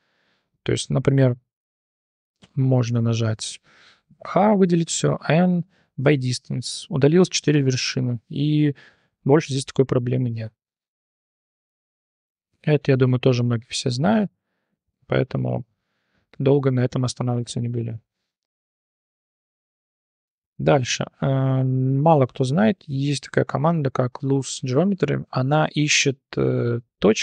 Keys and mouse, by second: 0.8 click, 1.4-2.2 drag, 4.2 a, 5.2 m, 8.1 3, 8.5 click, 8.9 g, 13.2-14.2 drag, 14.8 Tab, 15.1 click, 17.3 h, 18.0 /, 19.0 click, 19.6 Tab, 20.4 shift+click, 20.8 Tab, 22.0 /, 22.6 click, 22.9 Tab, 23.7 shift+drag, 24.0 click, 24.9 click.